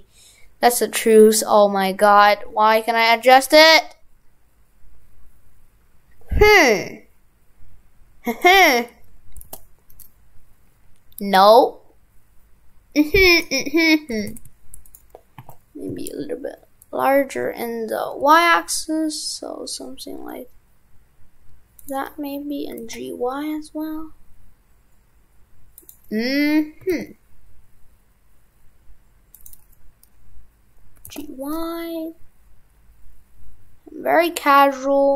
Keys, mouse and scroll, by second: 13.4 right click, 14.2 shift+f.